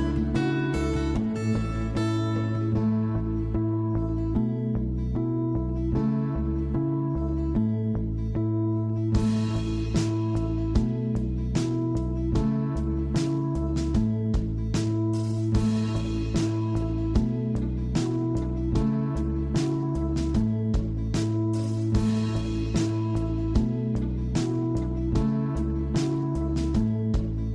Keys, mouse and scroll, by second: 0.6 scroll up 2, 0.8-1.9 middle drag, 1.9 Tab, 2.2-2.5 scroll down 3, 2.5-3.6 middle drag, 3.6 click, 5.1-5.9 scroll down 1, 5.9-7.4 scroll down 5, 7.4-8.7 scroll down 4, 8.7-9.6 scroll down 5, 9.6-10.8 scroll down 5, 10.8-11.4 scroll down 4, 11.4-12.9 scroll up 22, 12.9 scroll down 1, 13.1-13.4 middle drag, 13.4 scroll up 1, 13.6 click, 14.2 w, 14.9 click, 15.8 scroll down 4, 16.1 middle drag, 16.4 scroll up 3, 16.7 click, 17.3 shift+a, 22.9-23.3 scroll up 3, 23.3-24.0 shift+middle drag, 24.0 scroll down 3, 24.2-24.8 scroll up 3, 24.2-24.6 middle drag, 24.8-26.9 shift+middle drag, 26.9-27.5 drag.